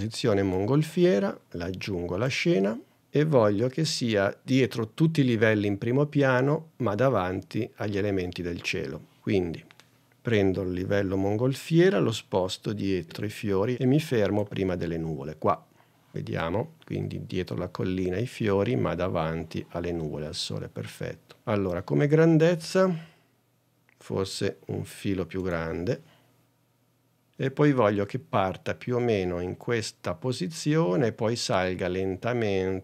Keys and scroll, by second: 22.8 super+Tab.